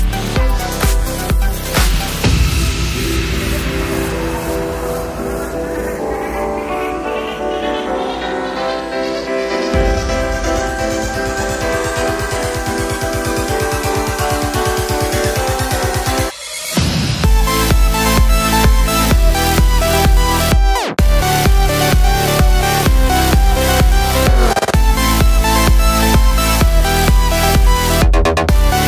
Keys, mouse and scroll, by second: 0.8 click, 3.4 click, 3.8 click, 6.3 click, 13.4 click, 15.4-18.3 drag, 20.5 click, 21.6 click, 22.4 click, 23.9 click, 27.9 click.